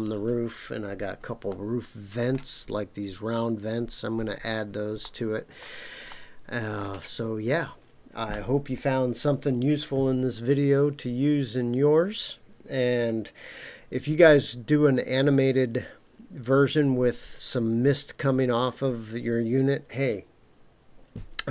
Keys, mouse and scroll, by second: 1.5-2.4 shift+middle drag, 5.0-5.6 shift+middle drag, 6.1-6.8 shift+middle drag, 7.2 scroll down 2.